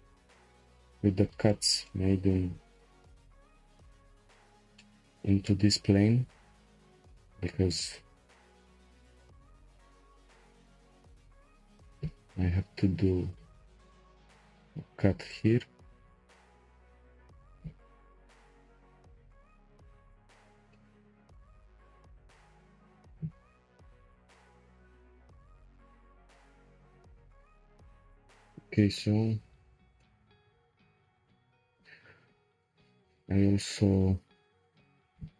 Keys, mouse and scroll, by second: 0.0 Tab, 0.5 click, 0.9 Tab, 1.5-6.1 shift+middle drag, 6.1-6.9 scroll up 1, 6.9-8.9 scroll up 1, 8.9-9.2 scroll up 1, 12.2 k, 18.6 shift+middle click, 19.4-20.1 scroll down 1, 20.1-20.7 scroll down 1, 20.7-23.4 middle drag, 23.4 p, 24.3 Tab, 24.6-25.0 scroll down 2, 25.0-26.4 shift+middle drag, 26.4-26.8 scroll down 1, 26.8-28.6 shift+middle drag, 28.6 click, 29.4-30.0 scroll up 3, 30.0 shift+middle click, 30.4 scroll up 2, 31.1 click, 31.5 Tab, 32.9 1, 35.2 Tab.